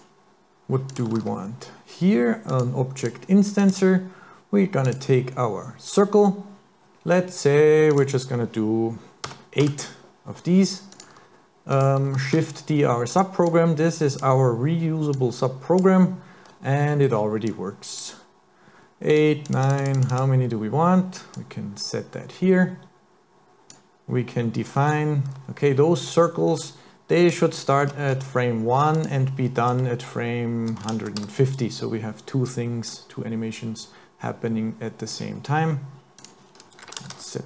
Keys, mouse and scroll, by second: 0.9 click, 1.2 shift+a, 4.9 click, 7.9 click, 11.0 click, 11.7 click, 12.3 shift+d, 13.5 click, 15.1 click, 17.5 click, 19.1-19.8 click, 19.6 click, 20.0 click, 20.2 click, 21.3 click, 27.3 click, 29.0 click, 33.0 click, 36.2 click, 37.0 KP_0.